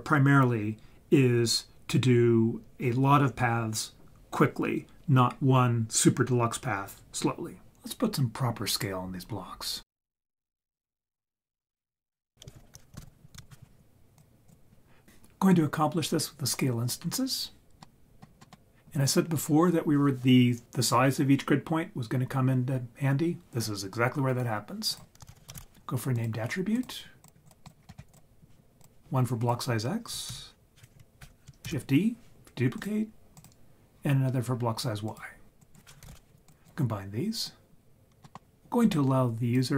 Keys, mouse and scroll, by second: 10.7-12.3 drag, 12.6 shift+a, 15.0 middle click, 17.8 middle click, 18.4 middle click, 24.9 click, 25.3 shift+a, 27.2-27.7 drag, 27.8 scroll up 5, 28.1 click, 29.4 click, 30.3 shift+s, 31.6 shift+d, 32.8 click, 33.3-35.1 drag, 35.6-36.5 drag, 37.4-37.9 drag, 38.0 scroll down 1, 38.2 middle click, 38.8-39.7 drag.